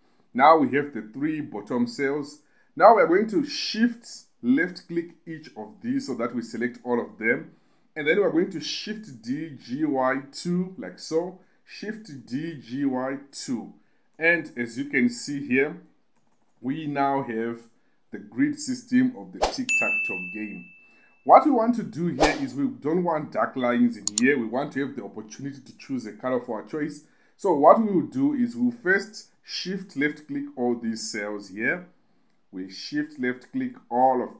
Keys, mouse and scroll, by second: 0.3 click, 5.0 shift+click, 5.9 shift+click, 9.2 shift+d, 9.8 g, 10.0 y, 10.5 2, 11.2 click, 12.3 shift+d, 12.6 g, 12.9 y, 13.7 2, 14.6 ctrl+KP_8, 14.7 ctrl+KP_8, 14.8 ctrl+KP_8, 15.8 click, 16.5 ctrl+KP_8, 16.7 ctrl+KP_8, 16.9 ctrl+KP_8, 17.2 ctrl+KP_8, 17.4 ctrl+KP_8, 17.7 ctrl+KP_6, 17.8 ctrl+KP_6, 18.0 ctrl+KP_6, 28.0 KP_2, 28.2 KP_2, 28.4 KP_2, 29.8 click, 30.6 shift+click, 31.2 shift+click, 31.8 shift+click, 32.4 shift+click, 33.0 shift+click, 33.8 shift+click.